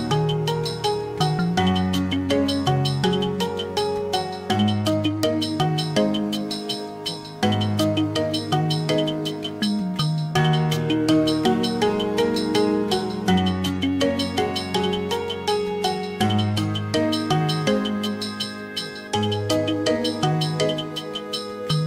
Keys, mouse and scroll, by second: 14.8 click, 16.9 click.